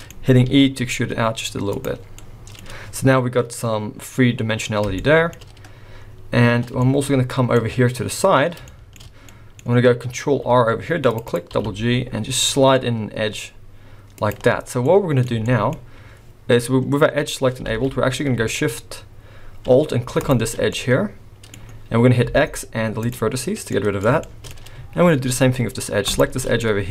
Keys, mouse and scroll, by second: 0.1 scroll up 1, 0.5 e, 2.2 middle click, 2.6-3.1 scroll down 3, 3.9 scroll down 2, 5.0 shift+middle click, 6.8 shift+middle click, 7.9 scroll up 1, 8.7 shift+middle click, 9.3 middle click, 10.3 ctrl+r, 11.5 g, 14.6-15.1 scroll down 4, 14.9 middle click, 15.4 shift+middle click, 15.7 scroll up 1, 17.7 alt+a, 20.2 alt+shift+click, 20.7 middle click, 22.2 x, 23.7 middle click, 24.2 shift+middle click, 26.1 alt+shift+click, 26.6 middle click.